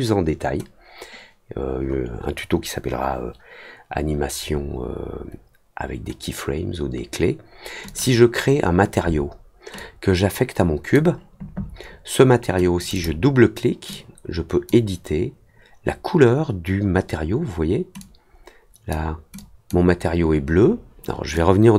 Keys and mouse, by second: 7.8 click, 9.7-10.9 drag, 12.7 click, 13.9 click, 17.9 click, 19.3 click, 21.3 click.